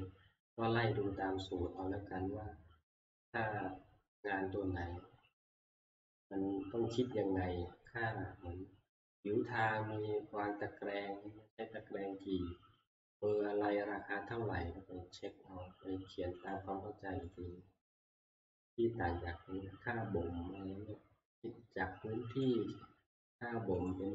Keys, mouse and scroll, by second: 1.8 click, 3.9-5.7 scroll, 6.6 scroll, 15.3 click, 16.5 click, 17.4 click, 22.4 click, 23.9 click.